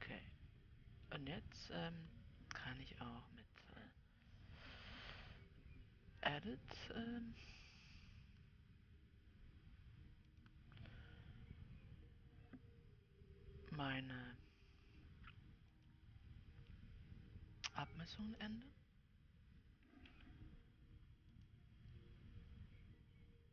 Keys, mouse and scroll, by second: 6.7-9.8 drag, 10.7-21.9 drag.